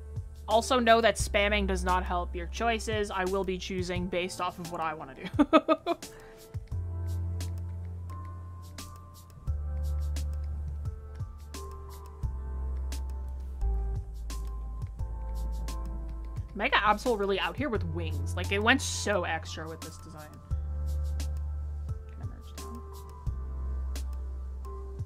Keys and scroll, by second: 13.8 ctrl+z.